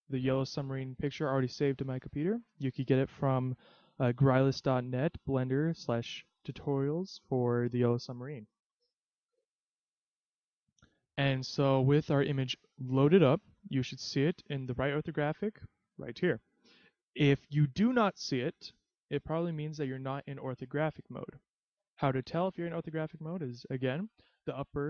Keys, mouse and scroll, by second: 8.7 click, 11.9-13.6 scroll up 3, 13.6-13.9 scroll up 1, 16.9-18.0 scroll down 4, 18.0-20.3 scroll up 1.